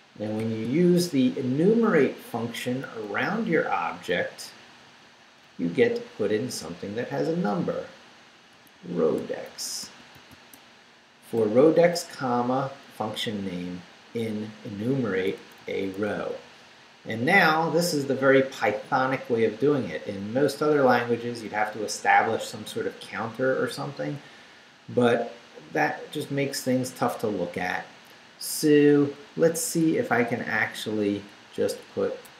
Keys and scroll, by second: 0.4 shift+0, 1.1 shift+Left, 1.7 Left, 2.5 Left, 7.5 r, 8.5-10.3 typing, 12.9 Right, 15.4 Right, 19.2 Down, 20.1 Up, 20.2 Left, 22.3 Down, 25.7 Down, 28.6 Right, 29.6 Down, 30.1 Right, 32.1-32.3 typing.